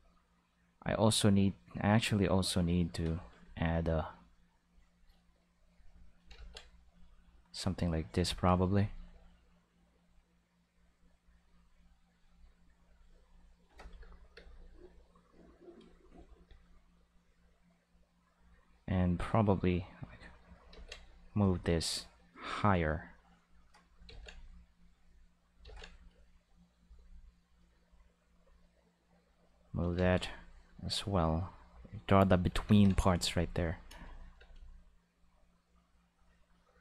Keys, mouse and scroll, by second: 4.6 click, 5.6 click, 6.3 ctrl+z, 6.8 click, 7.9 click, 11.2 click, 12.0 click, 12.8 click, 14.0 space, 14.3 space, 14.8-15.7 drag, 19.9 click, 20.7 ctrl+z, 21.0 click, 21.9 click, 23.1 click, 24.0 ctrl+z, 24.8 click, 25.6 ctrl+z, 28.9 click, 29.9 ctrl+z, 30.2 click, 31.3 click, 32.6 ctrl+s, 33.6 click, 33.9 space, 34.3 space, 34.5 click.